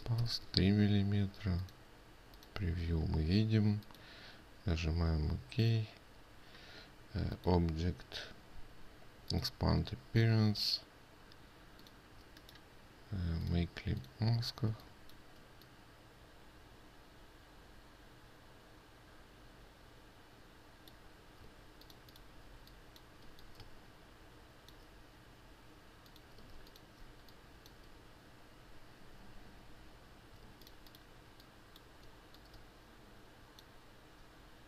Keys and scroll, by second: 22.0 ctrl+space, 31.0 ctrl+space.